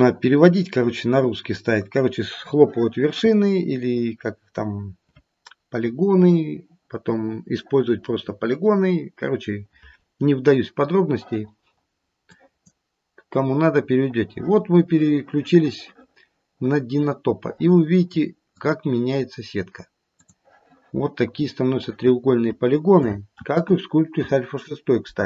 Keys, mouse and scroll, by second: 12.2 click, 13.3-15.2 scroll up 3, 18.8 click, 20.3 click, 23.5 ctrl+z.